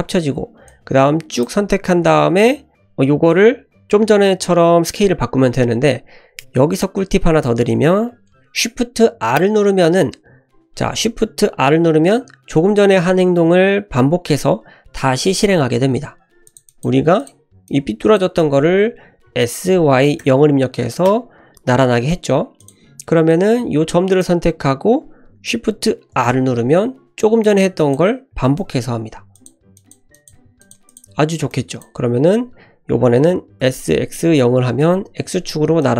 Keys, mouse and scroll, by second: 0.6 click, 16.4 click, 16.9 g, 17.6 click, 19.2 s, 22.6 click, 23.3-24.3 drag, 26.1 shift+r, 27.4 click, 28.5 shift+r, 29.3 click, 29.7 click, 30.1 click, 30.3 g, 30.9 click, 31.5 click, 33.6 s, 35.8 click.